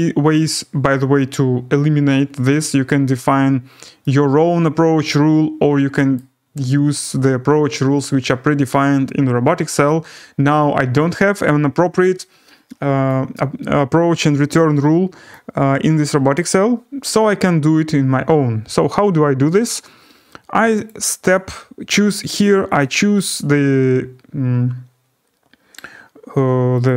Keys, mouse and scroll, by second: 2.7 scroll, 6.1 right click, 14.5 right click, 14.8-15.5 scroll, 16.3 right click, 20.8 click, 21.3 click, 22.3 click, 22.8 click, 23.2 click, 26.8 click.